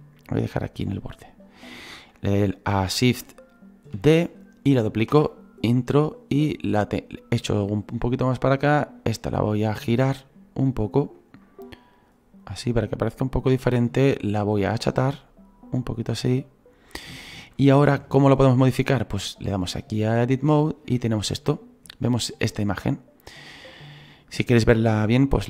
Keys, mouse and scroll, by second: 4.0 shift+d, 6.0-17.5 drag, 17.5 shift+middle click, 18.0 click, 18.0-18.6 scroll up 4, 18.6-19.0 scroll down 2, 20.6-25.4 drag, 21.5 middle click, 22.3 scroll up 2, 22.8-25.2 middle drag.